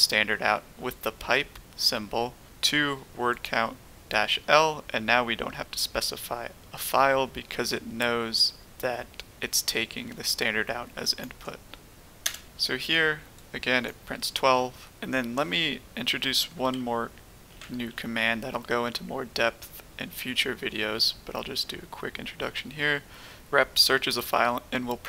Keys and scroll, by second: 12.2 Return, 17.2-18.3 typing.